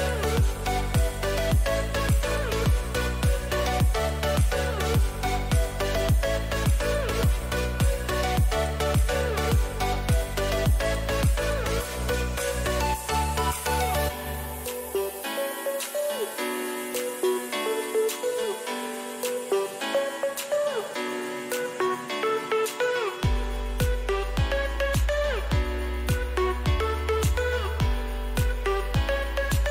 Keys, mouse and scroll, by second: 21.8-24.3 middle drag, 24.3-27.4 drag, 24.7 z, 27.4-29.1 middle drag, 29.6-29.7 middle drag, 29.6 a.